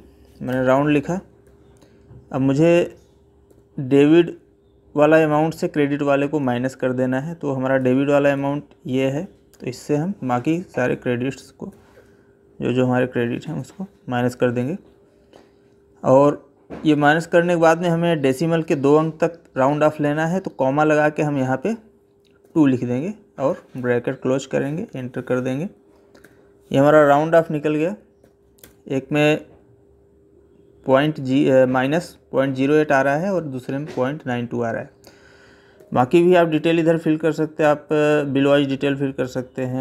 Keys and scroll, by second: 0.3 Tab, 1.3 Left, 3.3 Right, 6.2 Left, 7.6 Right, 26.0 Up, 27.1 ctrl+c, 28.0 Down, 35.6 Right, 39.6 Right.